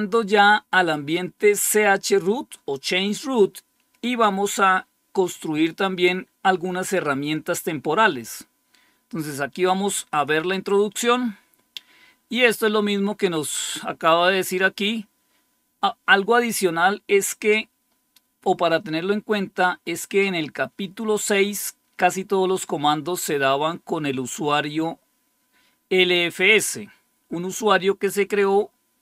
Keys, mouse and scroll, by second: 10.0 click.